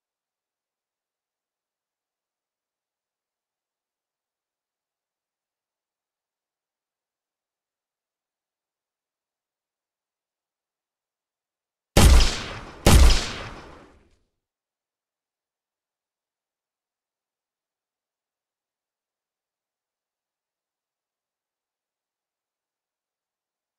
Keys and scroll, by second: 9.3 w, 12.9 w, 21.0 Escape.